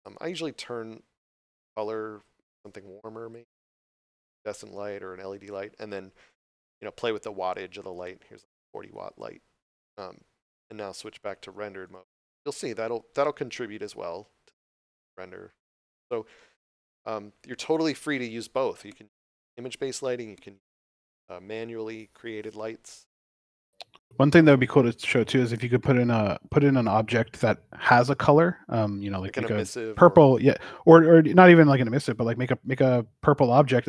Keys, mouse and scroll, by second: 6.2 click, 7.6 4, 8.3 Return, 11.8 click, 32.2 shift+a.